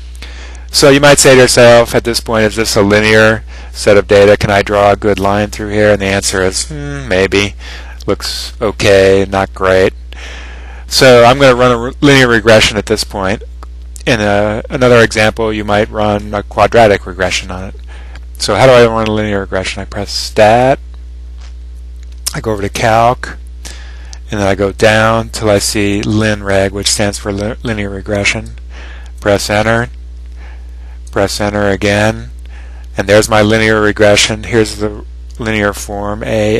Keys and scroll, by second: 22.6 ), 25.0 Down, 25.9 Down, 26.6 Down, 29.2 Return, 31.2 Return.